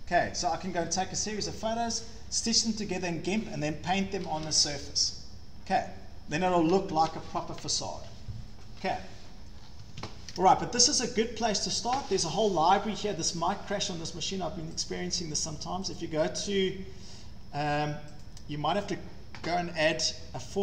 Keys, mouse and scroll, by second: 9.7 scroll, 9.9 Escape, 10.0 Escape, 11.7 shift+right click, 12.0 shift+scroll, 13.9 scroll, 14.9 click, 15.2 scroll, 16.0 click, 16.3-16.7 scroll, 17.1 scroll, 18.3 click.